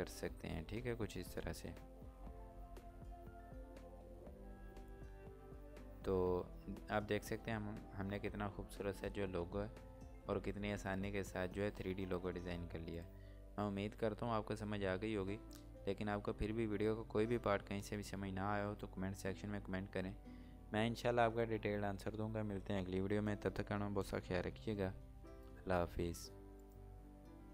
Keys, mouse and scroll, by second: 4.6 scroll down 1, 7.3 scroll up 1, 7.8 scroll down 1, 8.2 scroll up 1, 11.5-12.9 scroll up 1, 12.9 click, 26.4 click.